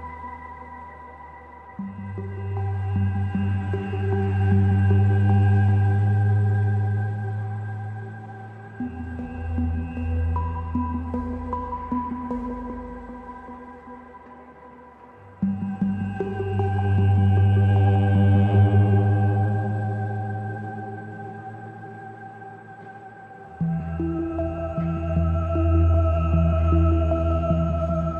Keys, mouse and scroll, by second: 19.6 click, 20.8-21.8 scroll down 5, 20.9 middle click, 21.4 shift+middle click, 22.0 scroll up 1, 22.2 shift+middle click, 22.7 ctrl+s, 22.9 middle click, 23.1 shift+middle click, 25.1 middle click, 26.1 click, 28.0 click.